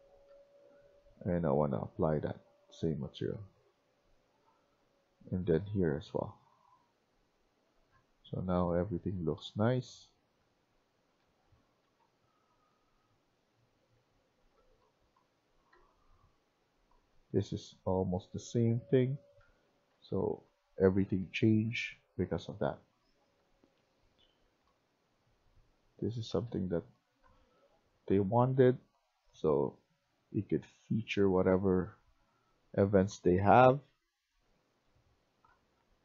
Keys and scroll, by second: 0.1 w, 0.7 w, 6.3-36.0 typing.